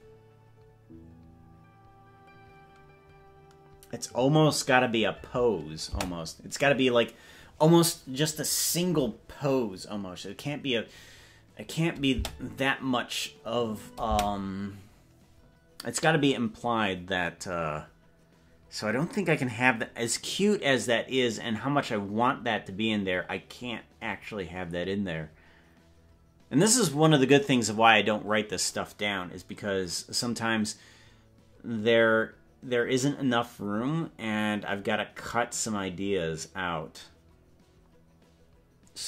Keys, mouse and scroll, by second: 6.1 space, 12.3 space, 14.3 space.